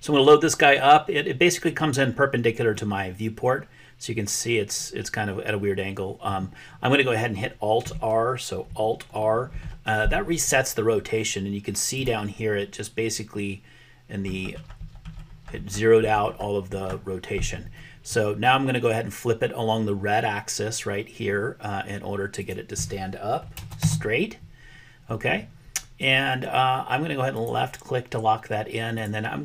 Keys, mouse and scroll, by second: 2.9-6.3 middle drag, 9.7 alt+r, 12.0 click, 22.5-25.2 drag, 27.3 click, 28.9 click.